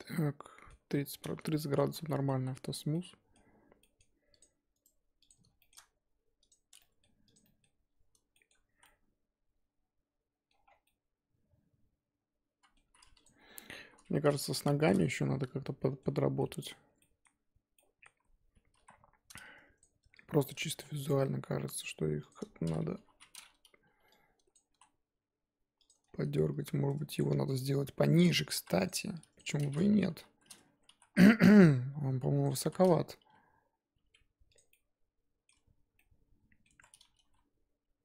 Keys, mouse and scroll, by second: 0.1-1.8 middle drag, 1.8 z, 2.1 middle click, 2.3 scroll down 1, 2.3 z, 2.9-4.5 middle drag, 4.5 click, 5.3 right click, 5.6 shift+middle click, 6.4 click, 6.8 middle click, 7.3 click, 7.4-8.8 middle drag, 8.8 z, 8.8-10.6 middle drag, 10.6 scroll down 5, 10.8-12.8 middle drag, 12.8-13.2 scroll up 4, 13.2 click, 13.7 KP_1, 14.7 shift+middle click, 14.9-15.7 scroll up 1, 15.8-16.8 shift+middle drag, 16.8 Tab, 17.0 middle click, 17.6 z, 17.9 middle click, 18.7 KP_1, 19.0-19.4 scroll up 2, 19.8 click, 20.4 shift+click, 20.7 s, 22.5-22.9 scroll down 2, 22.9 KP_3, 23.4-24.1 scroll up 1, 24.5 click, 24.7 s, 26.0-26.9 scroll down 4, 26.9 Tab, 27.2 click, 27.3 scroll down 1, 27.5-28.5 middle drag, 28.5 KP_1, 28.8 click, 29.3 click, 30.1 KP_3, 30.6 Tab, 30.7 scroll up 2, 30.9 z, 32.4 click, 32.7 z, 33.2 g, 34.7 middle click, 35.5 Tab, 35.9 scroll down 2, 35.9 middle click, 36.7 Tab, 37.1 g.